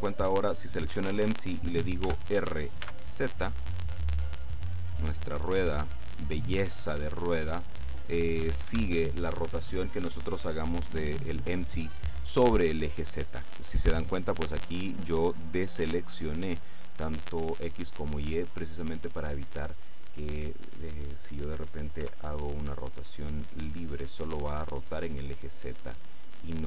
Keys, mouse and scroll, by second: 2.1 r, 2.9 z, 8.8 Escape, 14.3 right click, 21.1 right click, 22.2 r.